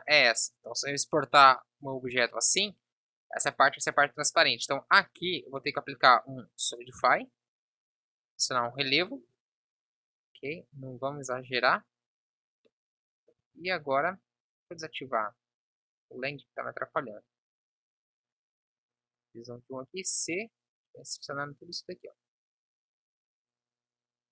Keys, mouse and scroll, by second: 13.5 Tab, 14.1 KP_1, 15.1 n, 19.1 KP_1, 19.9 c.